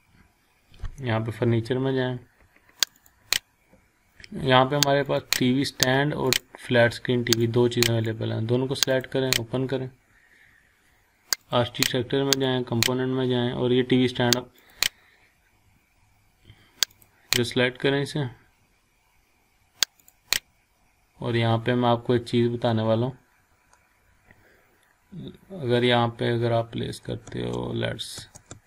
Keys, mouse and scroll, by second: 0.6-1.5 scroll up 1, 1.5-2.2 typing, 2.8-8.4 drag, 11.4 click, 16.9 click, 20.0 click, 21.8 scroll down 1, 22.3 scroll up 1, 23.8 scroll down 1, 24.6-25.0 scroll up 1, 27.3 space.